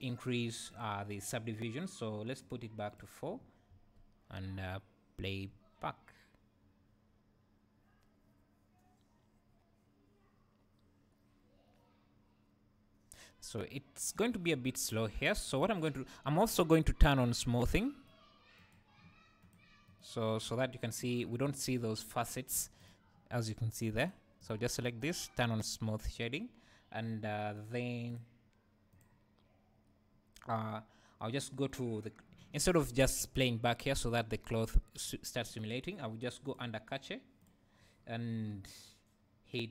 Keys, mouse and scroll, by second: 0.7-3.3 drag, 3.7 space, 16.5 Escape, 17.3 right click, 18.6 click, 19.4 click, 19.9-24.0 right drag, 20.6 scroll up 1, 21.4-21.9 scroll up 1, 24.0 click, 24.4-27.6 right drag, 27.6 click, 31.7-32.5 drag, 35.6-36.5 scroll down 1, 36.5-39.7 drag, 38.0-39.7 scroll down 2.